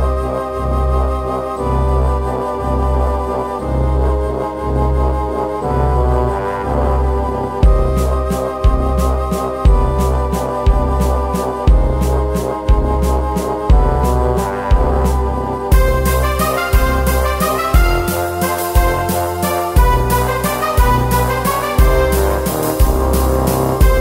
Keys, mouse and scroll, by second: 0.1 l, 0.4 p, 0.8 Tab, 0.8 click, 1.6 middle click, 2.0 click, 2.1 alt+F3, 2.1 n, 2.6 middle click, 3.7 ctrl+alt+shift+click, 4.5 middle click, 5.4 ctrl+alt+shift+click, 5.8 middle click, 6.0 right click, 6.0 s, 6.5 middle click, 6.5 z, 6.9 middle click, 7.2 KP_7, 8.3 z, 8.3 shift+s, 9.4 shift+a, 10.1 middle click, 10.5 click, 11.5 KP_Enter, 12.1 s, 13.3 s, 13.9 r, 14.1 s, 14.4 Tab, 15.3 middle click, 15.8 click, 15.9 right click, 16.0 middle click, 16.3 click, 16.7 middle click, 16.8 Tab, 17.2-19.4 typing, 17.9 Tab, 18.5 Tab, 20.0 middle click, 20.5 Tab, 21.1 click, 21.1 middle click, 21.5 right click, 21.6 middle click, 21.9 e, 22.8 z, 23.3 alt+shift+s, 23.8 click.